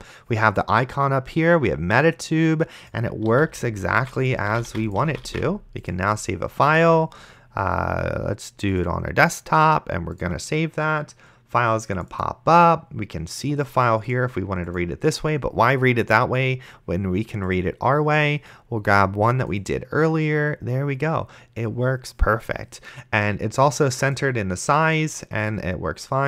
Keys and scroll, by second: 3.3-6.0 typing.